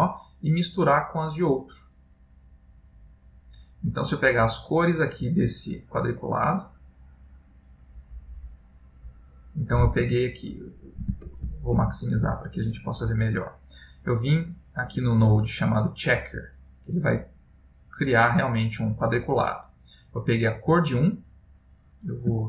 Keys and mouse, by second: 1.9 click, 3.6 click, 5.4 click, 8.6 click, 10.5 ctrl+middle click.